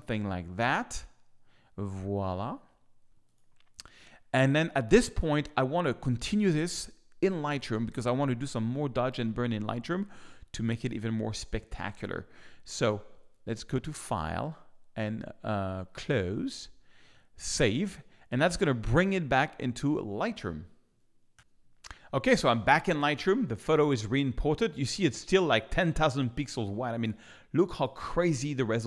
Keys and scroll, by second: 18.8 super+Tab, 21.3 ctrl+super+p.